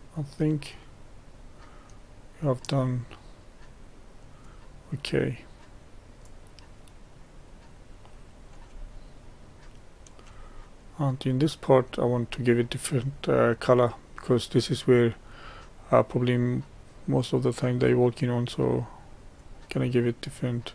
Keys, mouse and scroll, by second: 0.3-1.0 scroll down 2, 1.0-2.8 middle drag, 2.8-9.0 drag, 9.0-16.9 shift+middle drag, 16.9-20.7 drag.